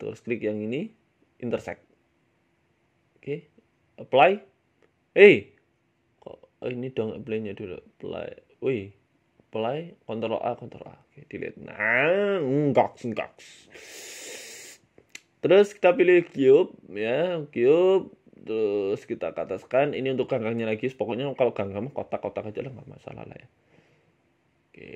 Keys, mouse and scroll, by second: 0.7 middle click, 1.7 click, 2.9 click, 3.1 ctrl+a, 3.8 right click, 4.8 Delete, 5.2 middle click, 5.5 ctrl+z, 5.8 ctrl+z, 6.5 ctrl+z, 6.7 click, 7.0 ctrl+z, 7.7 click, 8.0 ctrl+z, 9.6 click, 10.2 ctrl+a, 10.7 ctrl+a, 11.1 right click, 11.5 Delete, 11.8 middle click, 12.1 right click, 12.3 middle click, 12.9 g, 14.3 middle click, 14.7 shift+middle click, 15.1 s, 15.7 shift+a, 17.0 ctrl+z, 17.3 Tab, 17.6 shift+a, 18.4 s, 19.3 g, 20.5 d, 20.7 y, 21.4 s, 23.2 s, 24.0 middle click, 24.3 s.